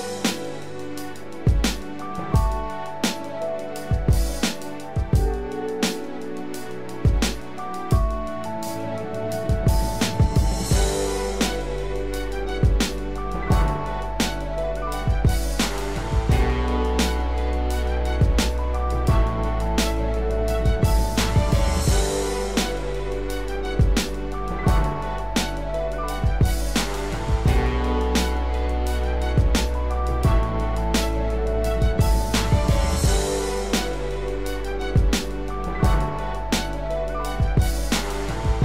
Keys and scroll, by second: 1.5 ctrl+=, 11.6 ctrl+=, 13.5 ctrl+0.